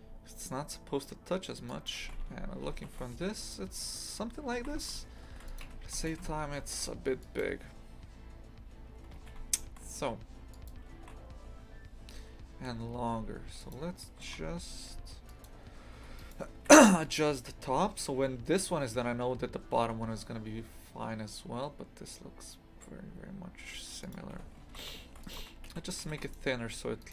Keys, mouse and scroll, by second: 2.0 shift+f, 4.5 shift+f, 5.6 a, 6.0 shift+f, 9.2 shift+f, 15.9 Tab, 16.2 right click, 16.5 Delete, 17.0-24.1 right drag, 24.1 click, 24.3 Tab, 24.6 shift+f, 25.4 3, 25.6 a, 26.0 a, 26.2 alt+shift+right click, 27.0 alt+shift+right click.